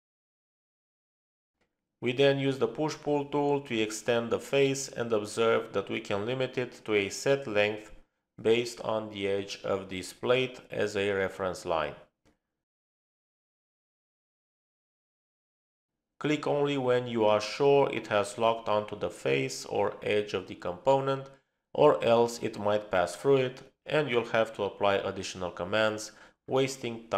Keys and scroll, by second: 0.0-0.8 typing, 2.6-3.4 typing, 6.7-7.3 typing.